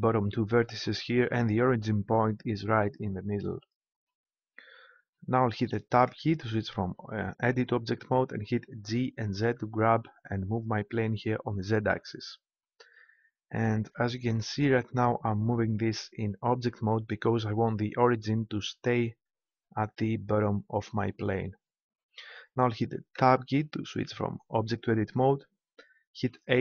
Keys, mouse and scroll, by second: 6.1 Tab, 8.8 g, 17.1-19.0 drag, 23.1 Tab, 26.3 a.